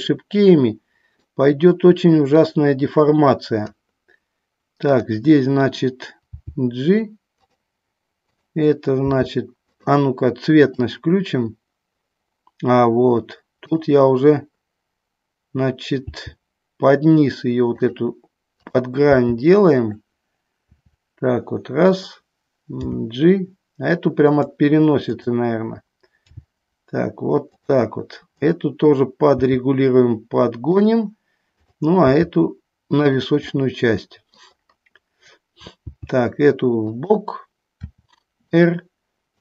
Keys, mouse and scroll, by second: 0.0-1.5 middle drag, 2.5-3.8 drag, 5.1 click, 6.4 g, 7.6 click, 8.4 click, 9.3 g, 9.8 click, 11.2 click, 16.2 g, 18.0 click, 18.7 click, 19.5 g, 20.9 r, 22.1 click, 23.1 g, 24.5 click, 25.2 click, 27.7 click, 28.6 click, 32.3 g, 33.3 click, 33.7 middle click, 36.1 g, 38.1 r, 38.7 click.